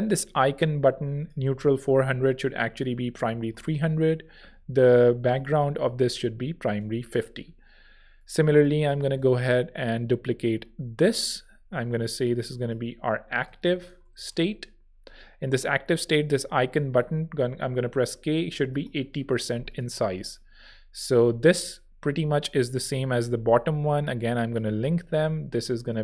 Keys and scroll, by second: 2.5-3.5 typing, 13.4-14.6 typing, 17.1-18.8 typing, 19.4 Return, 23.0 shift+e.